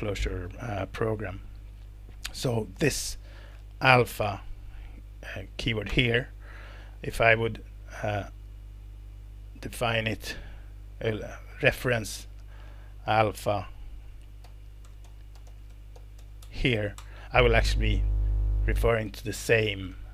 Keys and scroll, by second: 2.3 Escape, 5.9 alt+Return, 6.7 Escape, 10.5 super+Up, 14.4-16.7 typing, 17.0 alt+Return.